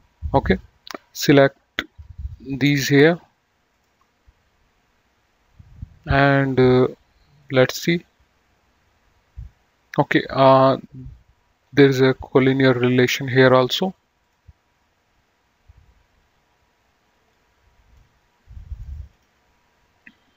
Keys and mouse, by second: 1.3 click, 2.9 ctrl+click, 7.6 click, 12.6 click, 14.5 click, 17.6 click, 19.3 click.